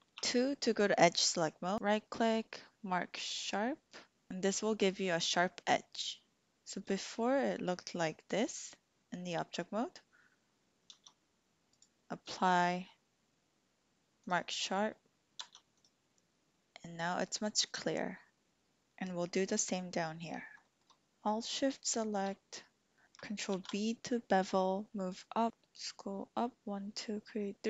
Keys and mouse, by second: 0.1 2, 1.7 ctrl+z, 1.7-4.3 drag, 6.9 Tab, 10.9 Tab, 11.7-14.2 drag, 14.2 right click, 15.4 Tab, 15.7 click, 20.0 shift+click, 20.6 shift+click, 21.9 alt+shift+click, 23.5 ctrl+b.